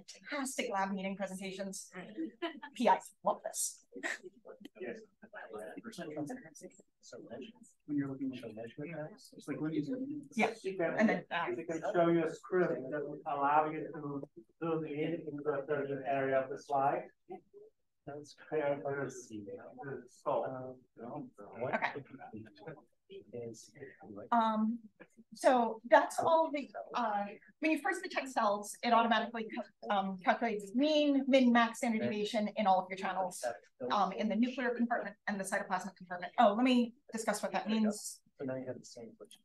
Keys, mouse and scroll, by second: 8.3-9.2 drag, 9.5 scroll up 1, 22.1 drag, 22.7 click, 36.2-39.1 scroll up 3, 37.2 right click, 39.1 click, 39.1-39.4 scroll up 1.